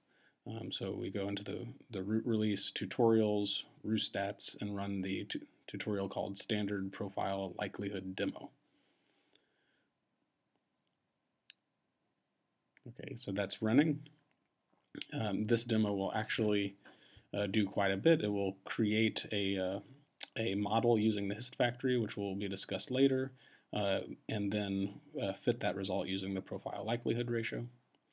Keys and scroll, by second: 2.0 Tab, 2.3 shift+s, 2.7 Tab, 7.0 Return.